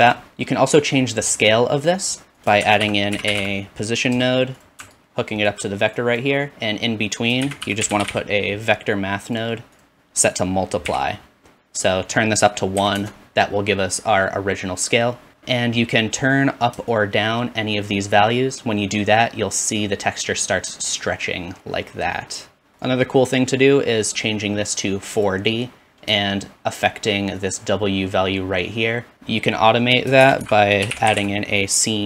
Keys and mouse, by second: 0.0 ctrl+space, 0.0-2.4 ctrl+middle drag, 2.5-4.2 shift+middle drag, 2.6 shift+a, 4.8-6.2 alt+drag, 7.4 shift+a, 10.2 click, 10.5 typing, 13.1-29.1 middle drag, 29.1-32.0 drag, 30.2 shift+a.